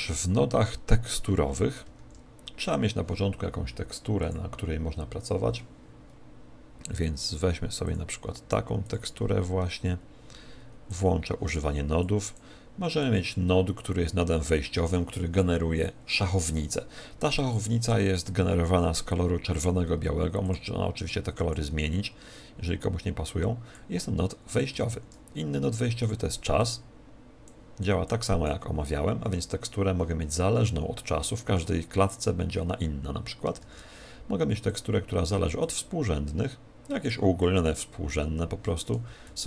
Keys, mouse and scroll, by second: 10.8 click, 21.0 click, 26.0 shift+a.